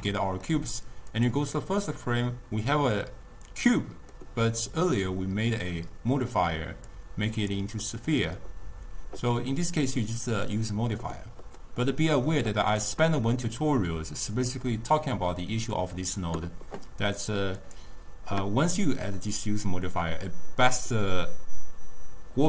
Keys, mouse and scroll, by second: 1.2 click, 1.8-7.0 middle drag, 7.0-10.0 drag, 10.6 click, 11.9-14.3 middle drag, 14.3-17.6 drag.